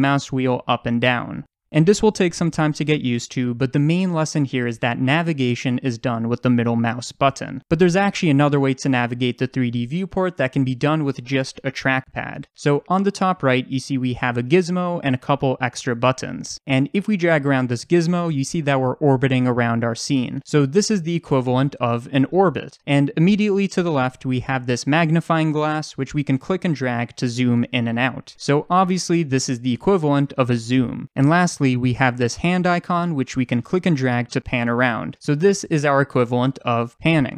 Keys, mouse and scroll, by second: 17.2-37.3 drag.